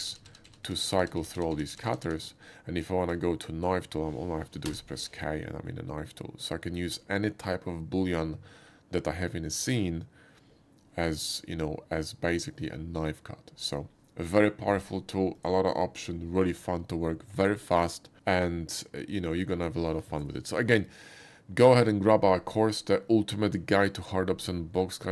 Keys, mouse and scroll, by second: 4.7 k, 7.2 k, 15.4 click, 19.0 middle click.